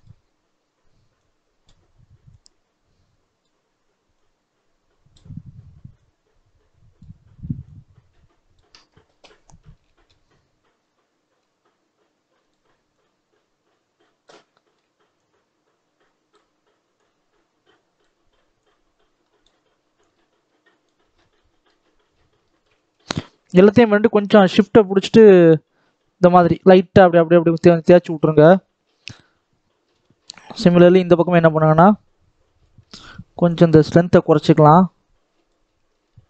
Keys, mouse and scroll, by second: 9.0 KP_7, 9.7 shift+middle click, 10.1-11.3 scroll up 4, 11.3-14.4 drag, 14.4 shift+middle click, 15.0-21.0 drag, 21.0 scroll down 3, 21.2 middle click, 21.7-22.3 scroll down 4, 22.3 shift+middle click, 22.9-23.7 scroll up 5, 23.7-27.7 shift+drag, 27.7-28.2 scroll down 2, 28.2 shift+middle click, 28.5-28.8 scroll up 2, 28.8 middle click, 29.8 KP_7, 30.1-30.6 scroll up 2, 30.6 shift+middle click, 30.9-31.5 scroll up 1, 31.5-32.8 drag, 32.8 ctrl+z, 33.5-35.8 drag, 35.8 scroll down 2, 36.0 shift+middle click.